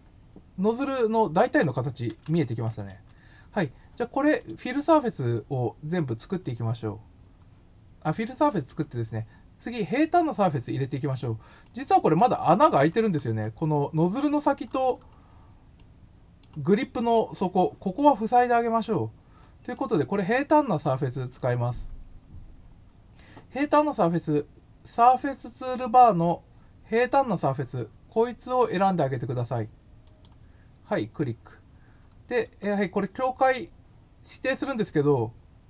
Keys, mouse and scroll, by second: 4.3 click, 7.2 scroll up 4, 8.5 click, 9.9-11.1 middle drag, 11.6 middle click, 12.6-13.4 scroll, 14.3-15.0 scroll up 3, 15.7 middle click, 17.9 middle click, 19.7-20.8 middle drag, 19.8 scroll down 1, 30.0 click, 32.1-32.9 scroll down 4.